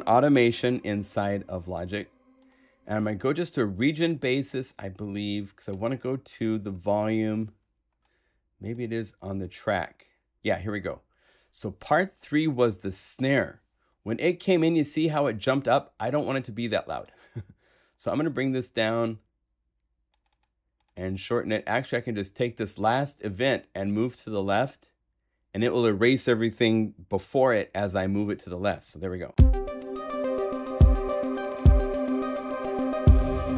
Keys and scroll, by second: 28.8 0, 29.3 Return, 31.9 super+Right.